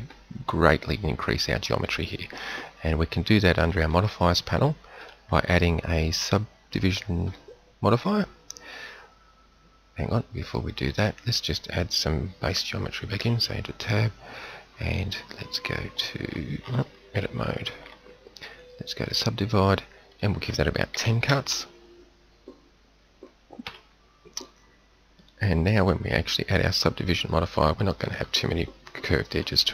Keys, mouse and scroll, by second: 3.7-7.8 drag, 10.7 click, 13.0 t, 17.1 Tab, 23.5 Tab.